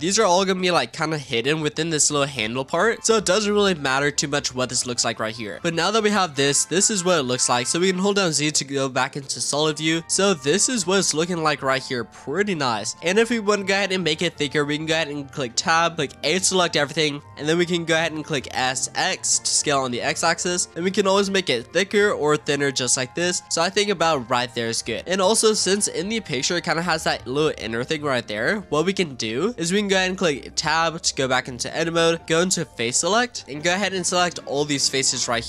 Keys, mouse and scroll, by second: 1.9-3.0 scroll down 6, 3.0-4.5 scroll up 3, 4.5-5.0 scroll down 1, 5.0-6.0 shift+middle drag, 6.0 z, 7.2 middle click, 7.8 z, 9.1-10.8 middle drag, 10.8 Tab, 11.1-12.8 middle drag, 12.8 Tab, 13.1 Tab, 13.8-15.5 shift+middle drag, 15.5 Tab, 16.2 a, 18.4 s, 23.5 click, 23.9-24.8 middle drag, 24.8 Tab, 25.0-26.6 middle drag, 26.6 click, 27.0 z, 28.1 scroll up 2, 28.5 scroll down 2, 28.8 z, 30.5 Tab, 32.5 click, 33.0 shift+middle click, 34.2 click, 34.8 shift+click.